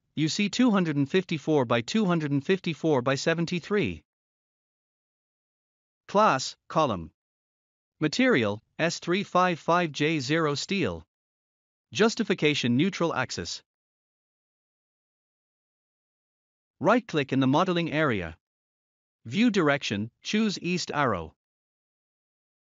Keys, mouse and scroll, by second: 0.4 click, 1.1-2.2 scroll down 1, 3.7 click, 6.3 click, 6.8-7.2 scroll up 1, 8.0 click, 9.5 click, 10.0-10.9 scroll up 1, 10.9 click, 12.5 click, 15.2 click, 18.1 right click, 20.1 click, 21.7 click.